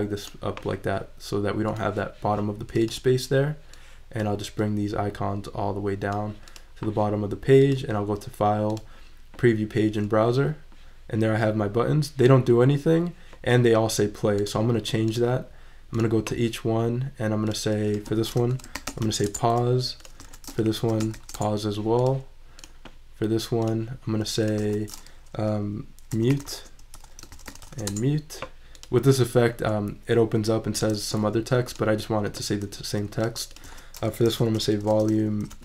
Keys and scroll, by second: 18.3-19.5 typing, 20.2 shift+super+Left, 20.2 super+a, 20.5-21.6 typing, 24.6 super+a, 25.5 shift+super+a, 25.9-28.1 typing, 33.7 super+a, 34.2 shift+super+v, 34.9-35.6 typing.